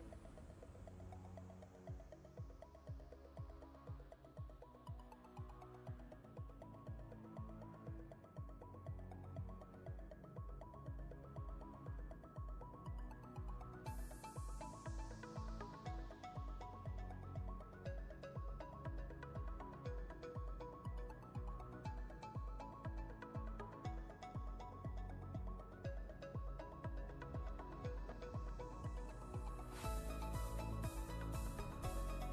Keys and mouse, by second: 1.2-4.2 drag, 5.0 ctrl+space, 5.1-7.6 ctrl+click, 5.4 ctrl+space, 7.6-8.4 space, 9.2 click, 13.8-14.5 drag, 16.3 ctrl+space, 16.4-17.6 ctrl+click, 17.1 ctrl+space, 17.6 click, 19.5-23.2 alt+drag, 24.9 ctrl+space, 26.8-27.7 drag, 29.9-30.7 typing.